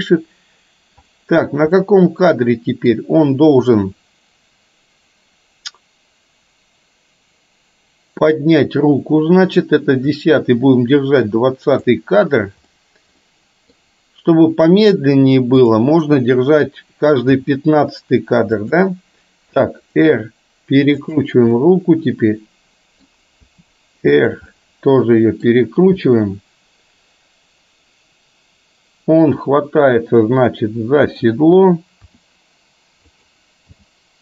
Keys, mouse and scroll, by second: 1.9-3.0 middle drag, 10.3-12.0 drag, 12.8-13.1 middle drag, 13.3-13.9 middle drag, 18.4 g, 19.6 r, 21.6-23.1 middle drag, 23.5 r, 24.5-25.5 middle drag, 26.1-31.6 middle drag, 32.3 r, 33.8 g.